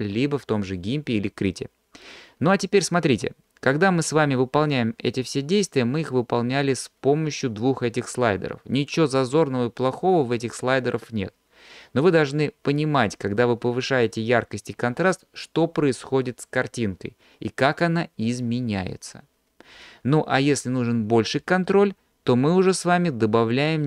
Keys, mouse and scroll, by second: 23.5 click.